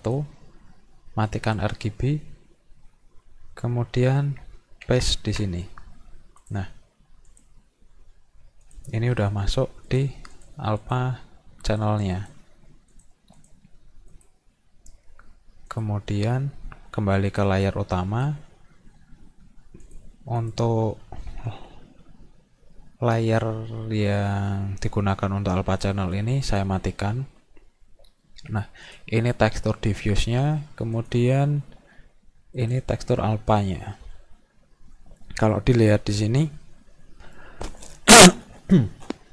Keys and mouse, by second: 0.0 click, 1.3 click, 4.9 ctrl+v, 6.4 click, 7.3 click, 8.7 click, 9.9 click, 10.4 click, 10.8 click, 11.7 click, 12.2 click, 12.9 click, 13.4 click, 14.1 click, 15.8 click, 19.8 click, 20.4 click, 21.3 ctrl+d, 26.5 click, 28.9 click, 31.0 click, 32.6 click.